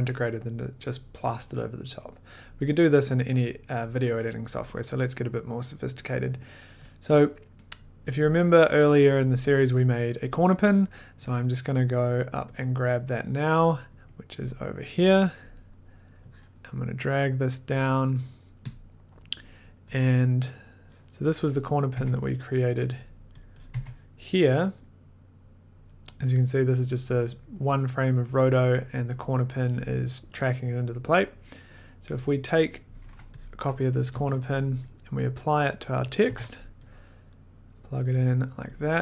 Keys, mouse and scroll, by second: 3.8 click, 6.9 click, 11.4 click, 11.8-12.7 scroll, 12.7 click, 12.7 scroll, 13.9 click, 14.5 click, 14.6 scroll, 15.4 click, 15.7 middle click, 16.5 click, 16.8 middle click, 17.3 middle click, 17.9 click, 18.3 click, 18.3 middle click, 18.7 click, 18.8-19.4 scroll, 20.0 click, 21.2 middle click, 21.2 click, 21.4 scroll, 21.6 click, 21.9 1, 22.9 scroll, 23.1 click, 23.4 click, 23.7 click, 23.7 1, 24.8 click, 32.1 click, 32.7 click, 33.5 click, 34.1 ctrl+c, 34.5 middle click, 34.9 middle click, 35.7 click, 36.3 ctrl+v, 36.9 click, 37.7 click, 38.3 click, 38.8 scroll, 38.9 click.